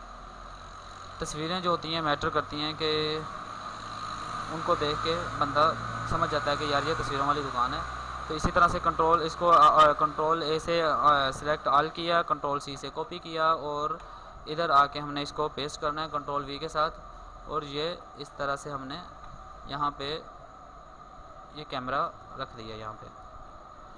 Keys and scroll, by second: 2.2 ctrl+a, 3.2 ctrl+c, 10.1 ctrl+a, 12.0 ctrl+c, 15.1 ctrl+v, 15.8 ctrl+t.